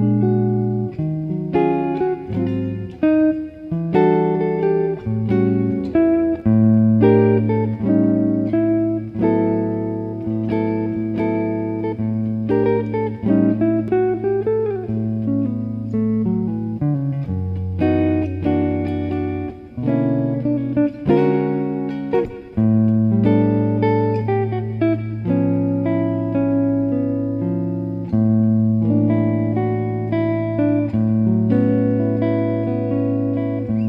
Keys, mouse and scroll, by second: 0.5 a, 0.9 a, 1.9 r, 5.5-8.0 middle drag, 6.9-11.6 right drag, 10.9 a, 11.4 a, 12.2 r, 15.3-17.3 middle drag, 18.1-21.1 drag, 30.9 click, 33.2 click.